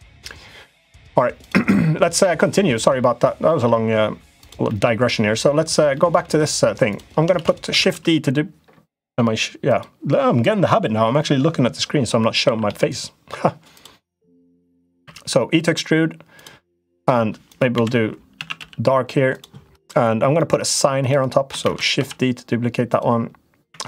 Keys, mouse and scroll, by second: 1.1 click, 3.3 middle click, 4.2 click, 4.4 middle click, 5.7 middle click, 6.7 click, 7.1 shift+d, 7.5 s, 12.2 s, 14.5 middle click, 14.8 e, 16.6 click, 17.2 click, 17.5 l, 18.1 a, 18.3 g, 20.1 middle click, 21.4 shift+d, 21.7 s, 23.4 e.